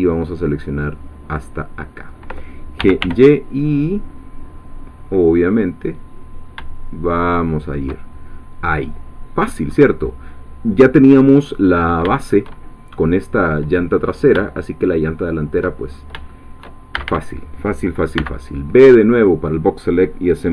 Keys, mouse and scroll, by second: 2.6-3.5 typing, 7.5 shift+click, 8.8-9.2 scroll up 2, 9.2 scroll down 2, 9.7-11.4 scroll up 2, 11.4 scroll down 2, 12.1 shift+middle click, 14.0-14.4 scroll up 3, 14.5 shift+middle click, 15.2-15.6 shift+scroll up 2, 15.8 shift+scroll up 2, 16.3 shift+middle click, 16.9 shift+a, 18.2 b, 18.6-20.5 drag.